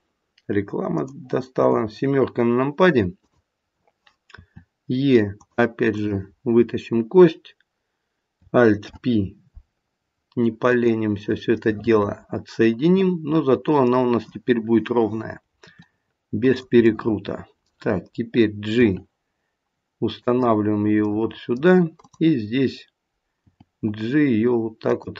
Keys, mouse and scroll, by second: 1.5 KP_7, 3.1 click, 4.3 e, 5.9 click, 8.8 alt+p, 11.6 middle click, 15.6 r, 16.8 middle click, 19.7 g, 21.0 middle click, 23.4 g.